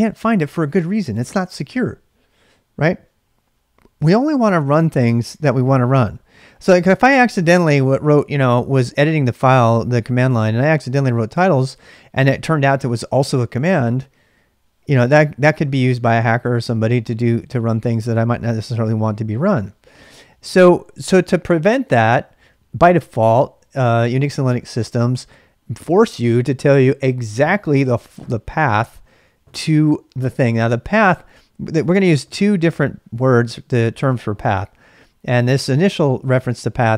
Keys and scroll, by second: 7.0-12.1 typing, 25.1 typing.